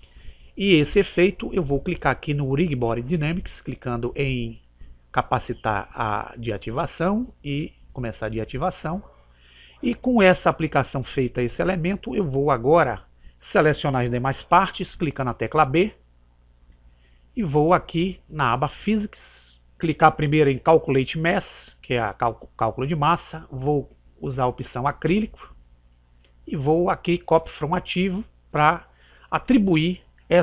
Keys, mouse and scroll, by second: 4.5 click, 7.9 click, 14.5 b, 19.2 click, 22.0 click, 27.9 click.